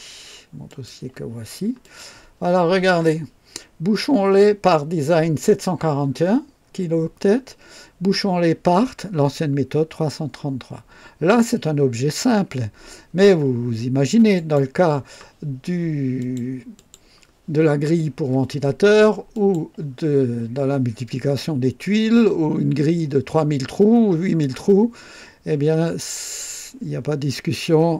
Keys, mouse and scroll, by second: 0.6 click, 1.8 click, 14.3 click, 16.1 click, 16.7 click, 19.3 click.